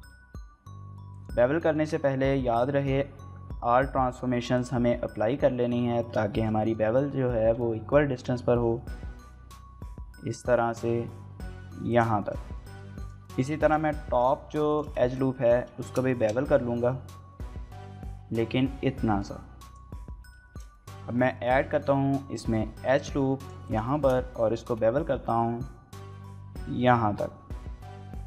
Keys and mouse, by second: 1.1 right click, 1.6 middle click, 1.7 Tab, 2.3 ctrl+a, 5.0 Tab, 6.3 shift+middle click, 6.5-7.6 ctrl+middle drag, 7.3 ctrl+b, 11.9 click, 12.2 shift+middle click, 12.4 middle click, 13.0 alt+click, 13.2 middle click, 13.6 alt+shift+click, 14.7 alt+shift+click, 15.0 shift+middle click, 15.3 middle click, 15.8 shift+middle click, 16.1 middle click, 16.7 ctrl+b, 19.6 click, 20.5 shift+middle click, 20.7 middle click, 20.9 Tab, 21.3 shift+middle click, 21.5 middle click, 22.0 ctrl+r, 22.7 Tab, 23.0 ctrl+r, 23.7 right click, 23.9 shift+middle click, 24.1 middle click, 24.5 ctrl+b.